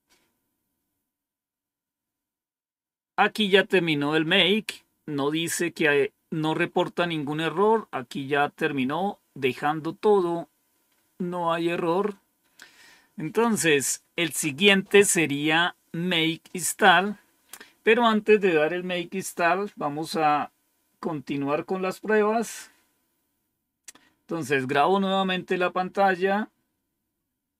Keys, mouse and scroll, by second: 10.8-11.4 scroll up 1, 11.4-12.6 scroll down 1.